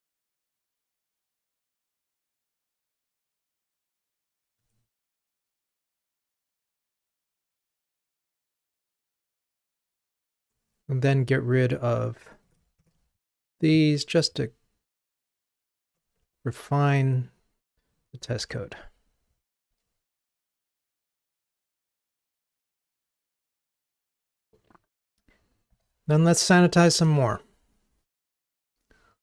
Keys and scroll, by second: 12.8 super+BackSpace, 18.4 super+BackSpace, 18.6 ctrl+r.